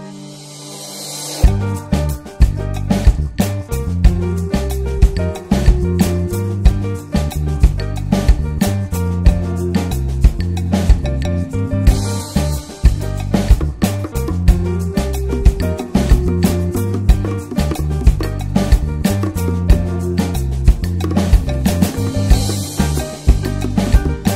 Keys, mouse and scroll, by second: 1.1 scroll down 1, 1.3-2.2 middle drag, 2.2 click, 3.4-5.7 drag, 5.7 middle click, 6.0 scroll up 1, 6.4-7.0 shift+middle drag, 7.0-8.2 ctrl+scroll down 4, 9.0 middle click, 9.8 scroll down 1, 10.4 scroll down 1, 10.6-11.3 shift+middle drag, 11.3 click, 11.6 scroll up 1, 11.9-12.3 shift+middle drag, 12.3 scroll up 1, 13.0-14.9 ctrl+scroll down 6, 15.2 ctrl+scroll up 1, 15.3-15.7 ctrl+scroll down 3, 15.9-16.3 ctrl+scroll up 2, 16.8 ctrl+scroll up 1, 17.3 scroll down 1, 17.5-18.5 middle drag, 18.5 ctrl+s, 18.7 ctrl+middle click, 19.1 ctrl+s, 19.5 shift+middle click, 19.8 scroll down 4, 20.8 click, 21.4 click, 21.7 scroll up 2, 22.5 click.